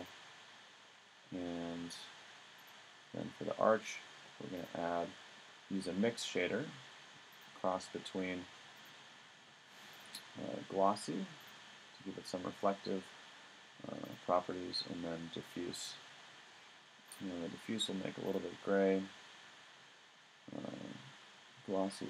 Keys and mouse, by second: 2.6 right click, 9.4-9.9 middle drag, 12.0 middle click, 14.0-15.7 right drag, 17.1 click, 18.9 middle click.